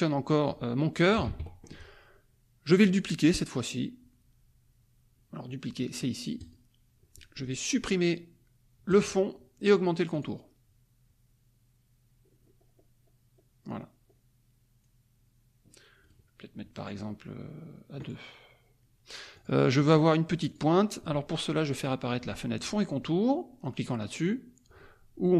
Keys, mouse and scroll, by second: 0.4 click, 1.2 ctrl+z, 6.3 click, 8.9 click, 10.1 click, 11.4-11.8 scroll up 2, 12.2-12.5 scroll up 2, 12.7-13.2 scroll up 2, 13.3-13.9 scroll up 2, 13.9 middle click, 14.1-14.7 scroll up 2, 14.7 scroll down 2, 15.0 middle click, 16.0 right click, 18.0 click, 19.5 click, 20.6 click.